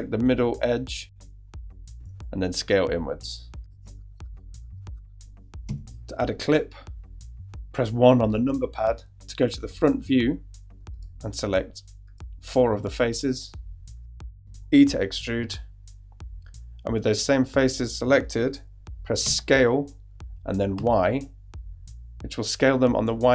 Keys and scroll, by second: 2.5 s, 3.7 Tab, 5.7 shift+Tab, 8.5 |, 10.7 shift+i, 15.2 shift+e, 19.2 s, 20.7 y.